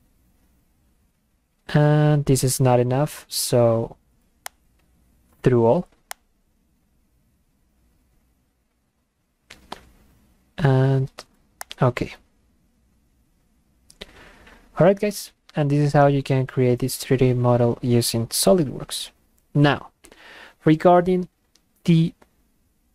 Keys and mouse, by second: 4.5 click, 6.1 click, 11.6 click.